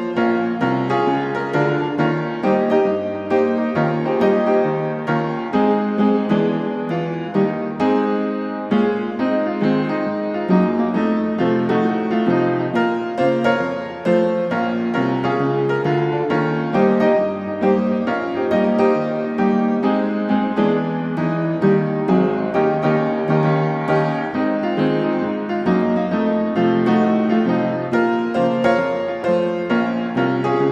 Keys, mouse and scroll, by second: 0.1 Escape, 1.6 click, 2.6 click, 3.8 click, 5.0 click, 6.3 typing, 6.8 Return, 10.0 click, 11.0 click, 11.7 click, 12.5-13.1 typing, 13.2 Return, 16.6 click, 17.9 click, 19.0 click, 20.6 6, 21.1-21.6 BackSpace, 21.3 5, 21.8 Return, 23.7 scroll, 25.7 middle click, 26.3 Escape, 28.9-30.0 drag.